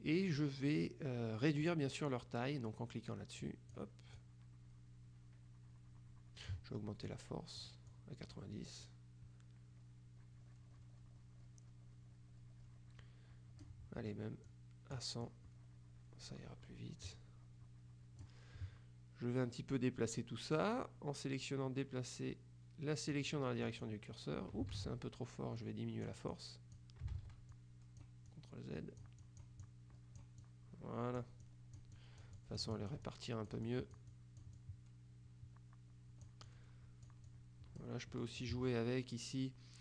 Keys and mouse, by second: 3.5 click, 7.1 click, 14.6 click, 23.3 click, 24.9 ctrl+z, 25.7 click, 27.2 ctrl+z, 27.6 ctrl+click, 29.3 click, 30.5 click, 31.5 click, 32.1 click, 33.7 click, 36.5 click, 37.3 click, 38.3 click.